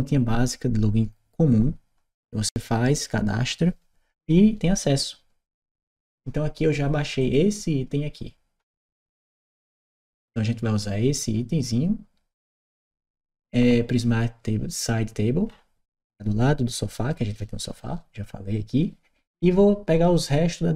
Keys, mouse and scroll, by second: 7.0 click, 9.9-11.1 scroll up 1, 11.1-15.0 scroll up 1, 15.2-16.5 scroll up 1.